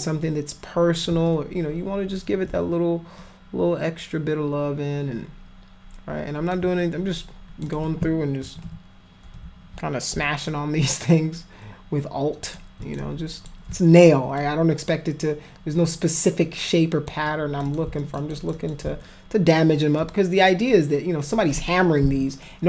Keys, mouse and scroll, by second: 1.3 shift+click, 3.2-6.5 alt+drag, 6.8 shift+click, 8.4 ], 8.7 ], 10.5-12.5 alt+drag, 12.8 shift+click, 13.0 shift+click, 14.1 alt+click, 15.8-17.1 alt+drag, 17.3 alt+click, 17.7 alt+click, 18.0 shift+click, 18.2 shift+click, 18.4 shift+click, 18.5 shift+click, 20.0 click.